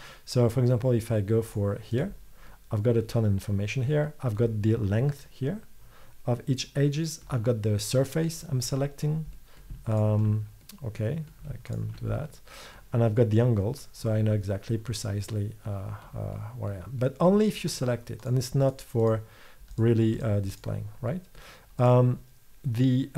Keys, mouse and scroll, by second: 2.0 click.